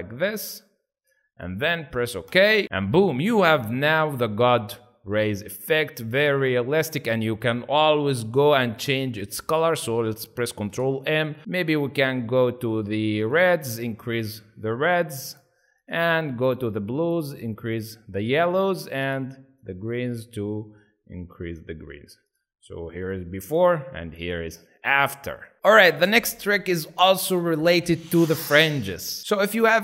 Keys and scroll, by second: 6.5 ctrl+z, 10.7 ctrl+m.